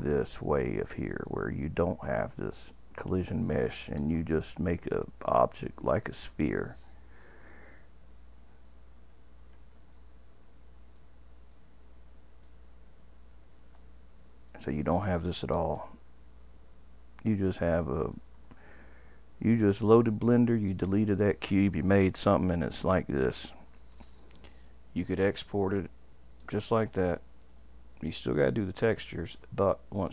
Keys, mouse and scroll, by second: 1.2 click, 2.0 click, 2.4 click, 4.0 Delete, 4.9 click, 5.8 click, 6.1 click, 7.5 shift+click, 10.9 click, 12.4 shift+click, 14.5 click, 18.1 click, 22.4 click, 26.4-29.5 drag.